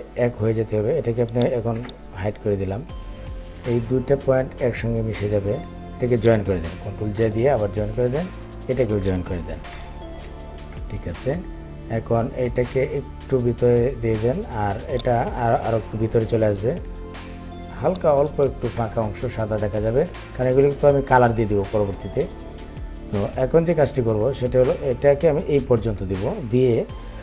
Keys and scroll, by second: 1.2 ctrl+3, 9.7 ctrl+j.